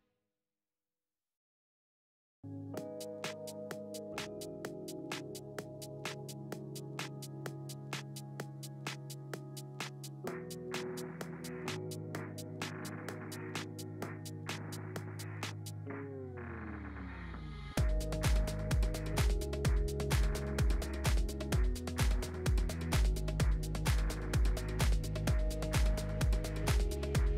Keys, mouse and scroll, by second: 2.4 click, 2.8-5.3 drag, 5.3 click, 6.3 click, 6.9 click, 7.7-14.3 drag, 14.3-14.9 scroll down 2, 14.9 click, 15.5 scroll up 1, 17.3 ctrl+alt+KP_0, 19.3 click, 24.9 KP_0, 25.8 n, 27.1 click.